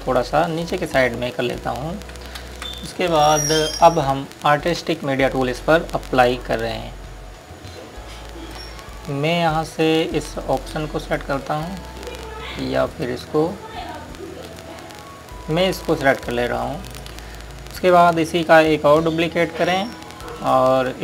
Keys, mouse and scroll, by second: 3.3 ctrl+space, 7.5 click, 12.6 scroll up 1, 13.7 click, 14.3 scroll up 1, 15.2 click.